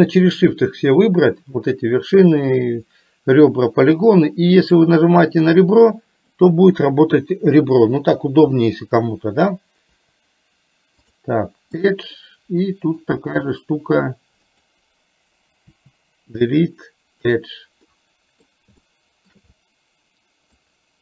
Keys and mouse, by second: 9.9 Delete, 12.0-13.0 middle drag, 15.7 Delete, 18.0 middle click, 18.9 shift+middle click, 19.6-20.6 middle drag.